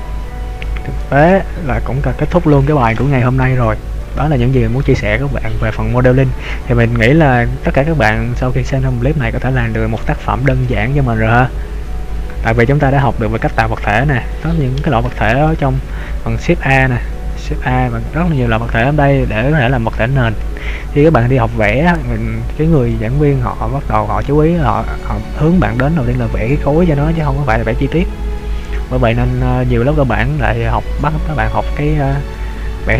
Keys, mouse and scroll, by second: 6.6 middle click, 17.2 shift+a.